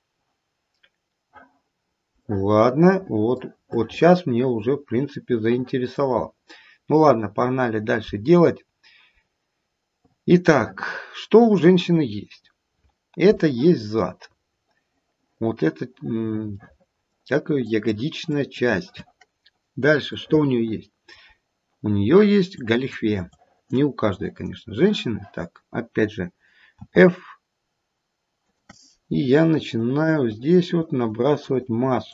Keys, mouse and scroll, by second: 1.8-2.2 scroll down 1, 2.2 middle click, 3.0 middle click, 3.6 middle click, 7.2 middle click, 7.2-8.0 scroll down 1, 8.5-9.1 scroll down 1, 9.1-9.9 scroll down 1, 9.9 scroll down 1, 10.1 middle click, 11.8-12.4 scroll up 5, 12.4-12.9 scroll down 1, 16.6 middle click, 16.8 middle click, 17.0 middle click, 17.7 click, 18.3 click, 20.1 middle click, 21.0 middle click, 21.3-22.6 scroll down 1, 22.6 click, 23.2 click, 24.0 click, 26.7 f, 29.2 click, 29.7 click, 30.2 click, 30.7 click, 31.3 click, 31.8 click.